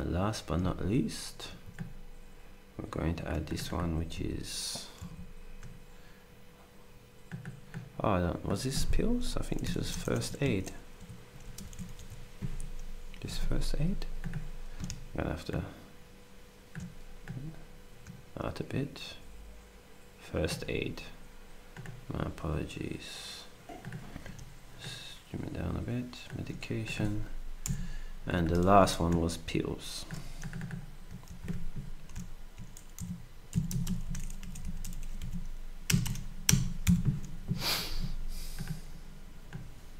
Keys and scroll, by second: 1.5 ctrl+d, 5.0 ctrl+a, 9.6-12.7 typing, 27.6 Delete, 29.0 ctrl+d, 31.5 ctrl+a, 33.7 typing, 35.6-36.5 typing.